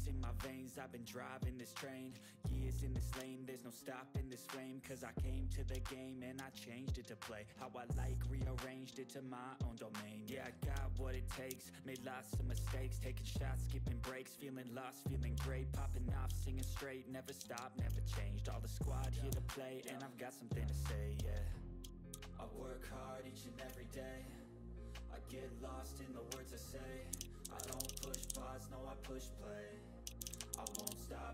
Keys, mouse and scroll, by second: 0.9 click, 3.2 ctrl+scroll up 1, 5.8 ctrl+scroll down 1, 6.3-6.7 ctrl+scroll down 1, 6.7 ctrl+scroll up 1, 7.2 click, 8.7 typing, 9.2 click, 10.4 shift+click, 11.4 ctrl+g, 11.7 click, 11.7 typing, 11.9 ctrl+scroll down 1, 12.4 click, 12.6-12.9 ctrl+scroll down 1, 13.7 click, 15.3-16.5 typing, 15.5 ctrl+scroll up 1, 16.0 click, 16.5 ctrl+d, 16.7 click, 17.3 ctrl+z, 17.8 click, 19.2 ctrl+g, 19.8 ctrl+d, 20.0-21.1 drag, 21.1 ctrl+scroll down 1, 21.3 ctrl+middle click, 22.1 ctrl+d, 22.6-23.8 drag, 26.8-31.2 typing, 28.8 click.